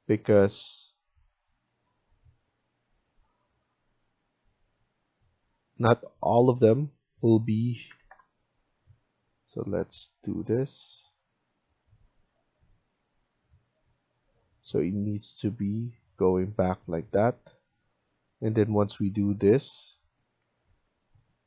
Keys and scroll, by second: 7.6-8.4 typing, 20.3 Escape, 20.6 Escape.